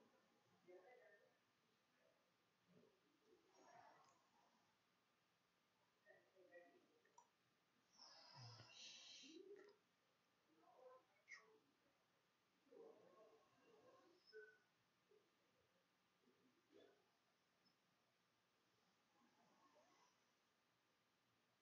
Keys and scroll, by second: 0.0-2.3 typing, 1.7 Delete, 1.9 Return, 4.9 0, 20.0-20.9 typing.